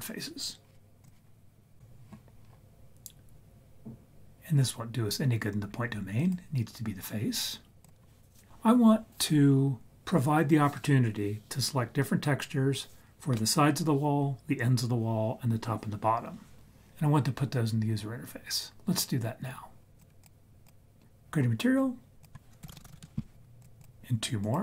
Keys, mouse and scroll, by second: 6.1-7.8 drag, 20.1 ctrl+z, 20.2 click, 22.2 click, 23.6 click, 23.8 click, 24.3 click.